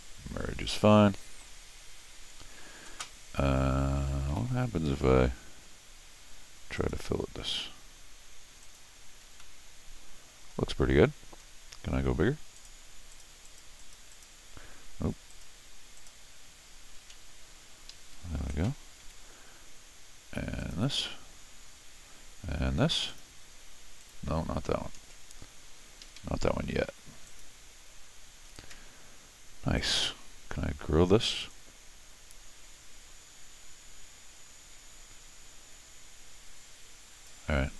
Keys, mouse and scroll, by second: 0.6 scroll down 1, 0.7 middle click, 4.3 u, 6.8 click, 8.6 click, 9.4-10.5 middle drag, 12.5 click, 13.1 click, 13.4 click, 13.8 click, 14.1 click, 15.3 click, 16.0 click, 17.9 Escape, 18.0 Escape, 19.0 u, 20.6 click, 23.1 click, 24.0 click, 26.0 Escape, 26.2 Escape, 26.9 u, 27.3 click, 29.8 click, 31.5-37.2 drag.